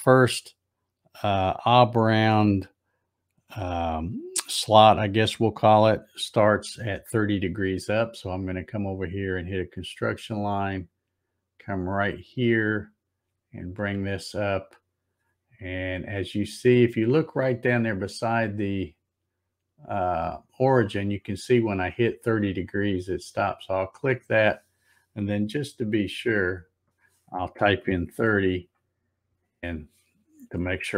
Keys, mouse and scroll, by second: 9.5 click, 12.3 click, 23.3 click, 25.5 Tab, 26.2 Tab.